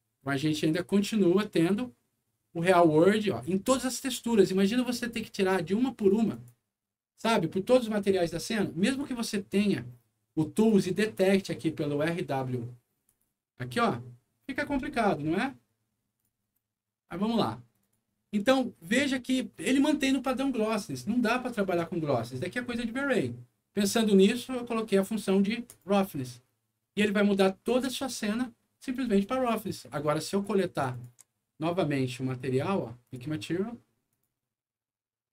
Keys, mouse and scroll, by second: 0.6 click, 3.0 middle click, 3.8 click, 5.6 middle click, 6.3 click, 7.0 scroll down 1, 8.9 click, 9.3 scroll down 1, 9.8 scroll up 1, 10.1 middle click, 10.5 click, 13.0 click, 16.1 click, 16.6 middle click, 17.2 middle click, 17.8 click, 23.8 click, 25.6 click, 30.4 click, 30.9 ctrl+click, 33.0 ctrl+click, 34.0 ctrl+click.